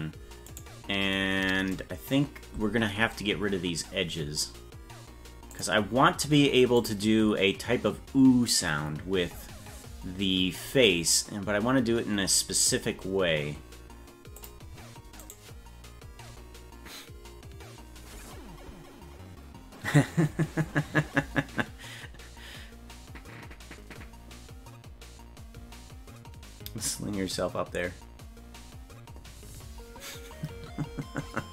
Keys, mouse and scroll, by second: 0.5 right click, 5.6 click, 6.8-13.2 drag, 14.5 click, 15.3 right click.